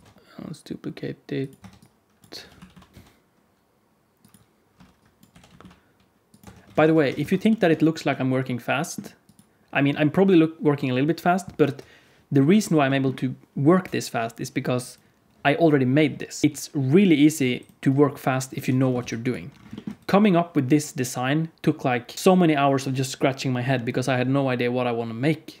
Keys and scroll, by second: 0.0 Tab, 0.0 shift+d, 1.5 Tab, 2.3 g, 2.9 KP_1, 2.9 KP_3, 2.9 shift+d, 4.7 r, 5.0 Tab, 5.0 r, 5.2 g, 6.3 Tab, 6.6 alt+z, 6.9 alt+a, 7.2 ctrl+s, 11.6 KP_1, 18.6 alt+a, 19.0 ctrl+s.